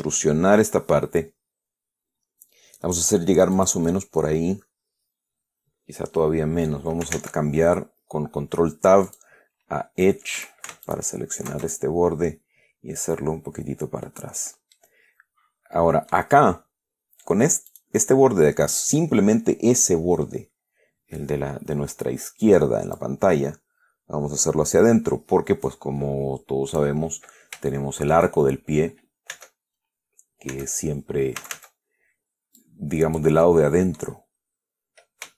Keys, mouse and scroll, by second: 3.8 click, 4.2-7.2 drag, 7.4 ctrl+Tab, 9.4 click, 10.6 a, 11.1 alt+shift+right click, 12.0-14.7 alt+shift+drag, 15.0-16.6 middle drag, 18.0 right click, 20.8 scroll up 1, 23.3-27.3 drag, 28.0 shift+middle click, 29.6 Tab, 30.8 Tab, 31.7 a, 32.9 click, 33.7 middle click, 34.5 scroll down 2.